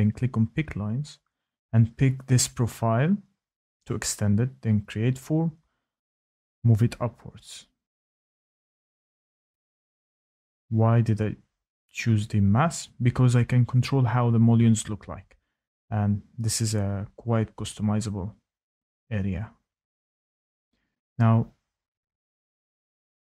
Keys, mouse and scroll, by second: 0.7 click, 2.9 Tab, 3.8 Tab, 5.0 click, 5.9-6.8 scroll, 6.8 click, 6.8 scroll, 7.4-8.2 scroll, 11.7 click, 12.5 middle click, 13.7 shift+right click, 16.7 Tab, 17.0 Tab, 17.0-17.5 scroll, 17.5 Tab, 19.7 click, 19.7-20.5 scroll, 21.7 click, 22.2-22.7 scroll, 22.8 middle click.